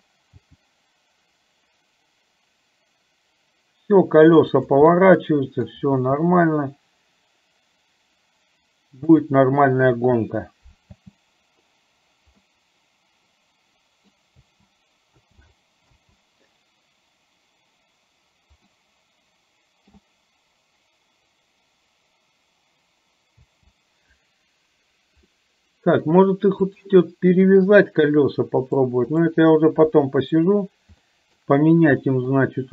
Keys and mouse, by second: 5.1 middle click, 11.1 space, 12.5-14.1 middle drag, 14.5 space, 15.3 space, 16.1 space, 18.8-20.2 middle drag, 23.5 space, 25.3 middle click, 26.7 click, 28.7 click, 29.8 KP_3, 31.1 middle click, 32.1 middle click.